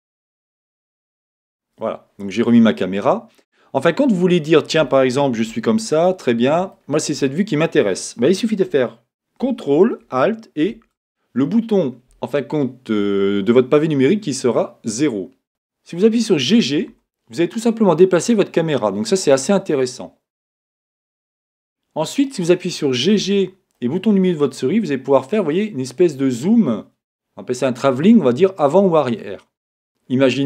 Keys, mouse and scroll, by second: 2.1 scroll up 2, 2.2 scroll down 1, 2.4-10.6 middle drag, 10.6 ctrl+alt+KP_0, 12.0-13.9 middle drag, 16.7 g, 21.2-23.2 drag, 23.2 g, 29.7 click.